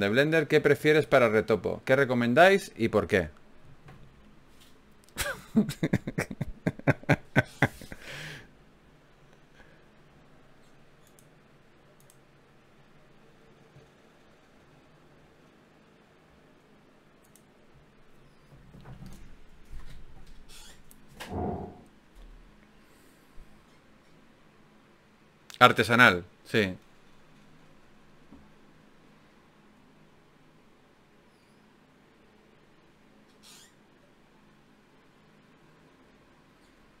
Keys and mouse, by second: 1.1 g, 2.1 g, 5.5 g, 13.0-14.8 right drag, 14.8 ctrl+r, 18.0 g, 29.0 shift+q, 30.0 shift+q, 35.3-37.0 middle drag.